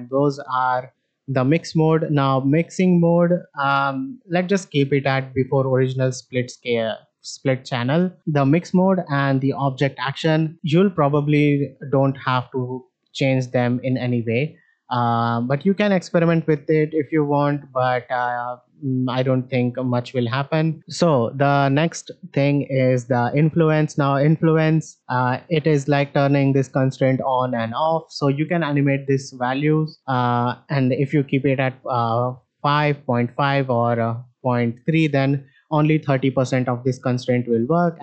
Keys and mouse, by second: 1.3-7.9 drag, 23.0-24.5 drag, 25.2 shift+middle click, 26.3-27.9 drag, 29.8-32.5 drag, 33.5-34.7 drag.